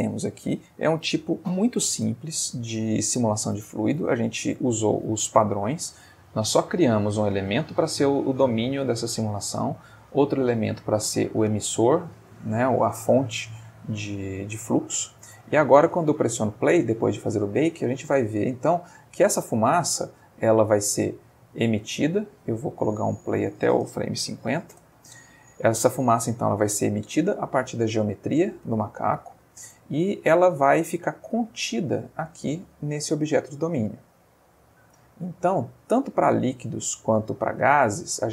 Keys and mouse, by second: 15.9 space, 18.2-19.1 middle drag, 19.6-20.2 middle drag, 21.6 space, 21.8 Escape, 23.3 click, 24.4 5, 24.5 0, 24.7 Return, 25.7 space, 27.2-27.8 middle drag, 27.9 space, 29.1 space, 30.2-33.8 drag, 33.9-38.0 middle drag.